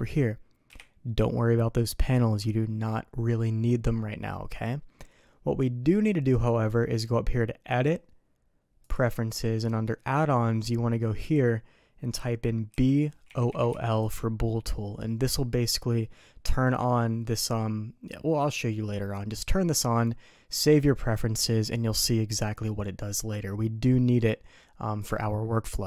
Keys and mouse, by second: 0.7 n, 7.7-9.0 drag.